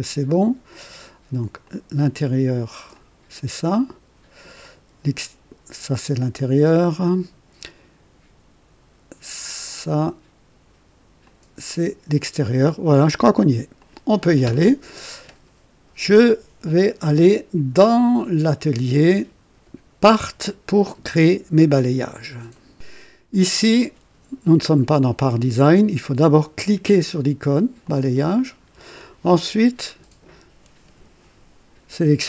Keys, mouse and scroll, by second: 1.5 click, 2.8 click, 3.6 click, 4.5 click, 11.1 click, 13.7 click, 18.3 click, 19.9 click, 22.4 right click, 27.8 click.